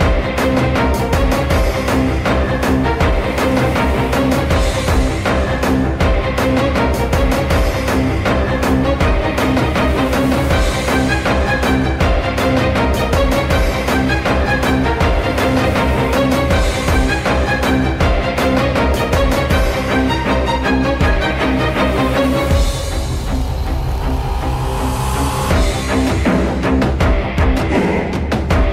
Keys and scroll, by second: 1.8-2.8 typing, 5.4-6.4 typing, 7.6-9.4 typing, 9.9 F3, 25.3 c, 25.9 c, 28.6 c.